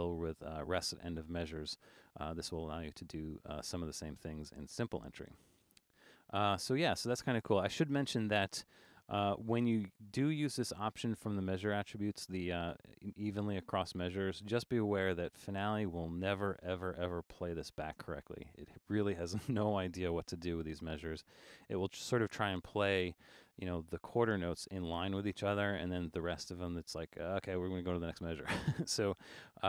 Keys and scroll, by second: 11.9 Return.